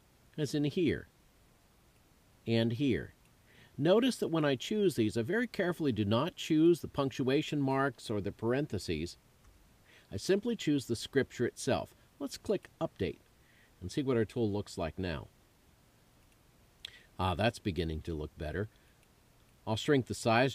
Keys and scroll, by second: 9.3 super+u.